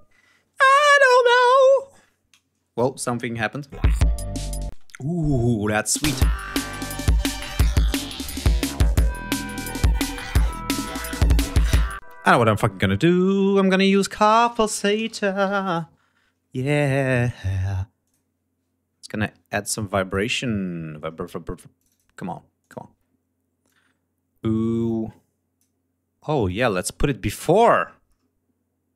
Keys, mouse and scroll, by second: 2.5-2.8 scroll up 2, 3.5 ctrl+click, 3.6 ctrl+space, 4.1 ctrl+scroll down 2, 4.6 ctrl+space, 4.9 ctrl+scroll down 2, 5.6 click, 5.8 space, 8.9 scroll down 2, 9.9 d, 11.3 click, 11.9 space, 12.3 right click, 13.7 click, 14.3-16.2 typing, 17.0 click, 17.9 click, 19.6 click, 21.7 click, 22.5 click, 23.5-27.8 drag.